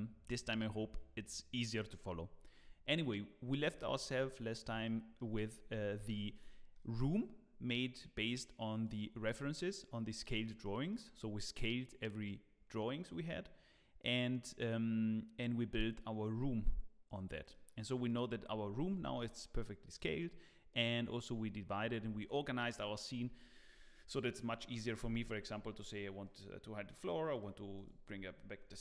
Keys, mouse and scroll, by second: 3.8 middle click, 4.3 shift+middle click, 4.8 middle click, 5.9 alt+h, 6.3 click, 6.7 middle click, 8.8 click, 9.6 middle click, 10.6 middle click, 17.0 click, 17.5 middle click, 18.0 click, 18.9 h, 19.5 middle click, 26.2 click, 26.9 click, 28.7 click.